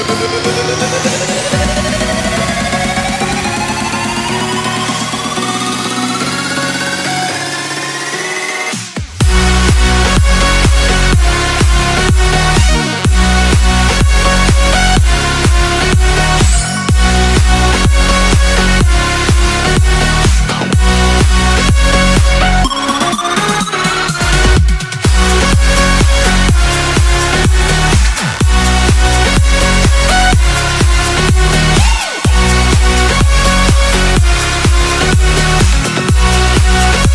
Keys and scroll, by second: 1.7 z, 3.1 space, 3.4 x, 4.5 x, 4.8 space, 5.2 space, 5.8 ctrl+space, 6.0 x, 7.0-11.3 typing, 12.9-15.3 typing, 17.2 x, 18.3 z, 20.3 x, 21.1 z, 24.4 x, 25.3 space, 25.6 z, 26.6 space, 27.8 z, 29.2 ctrl+0, 30.6 x, 34.1 v, 35.4 ctrl+space, 36.4 ctrl+z, 36.6 ctrl+space.